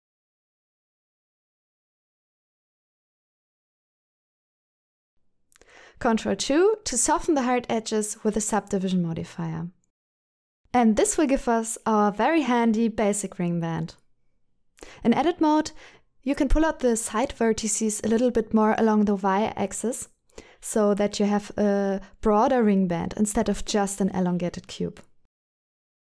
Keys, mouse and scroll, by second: 2.2-4.5 middle drag, 5.7-7.3 middle drag, 8.3 ctrl+2, 8.8-10.0 middle drag, 10.3 shift+middle click, 10.7 middle click, 11.7 Tab, 11.9 middle click, 12.7 alt+a, 13.4 KP_3, 14.6 alt+z, 15.0 c, 16.1 alt+z, 16.4 c, 17.2 right click, 17.4 middle click, 18.6 g, 18.9 y, 20.8 click, 21.0 middle click, 22.2 KP_1, 23.4 shift+middle click, 25.8 s.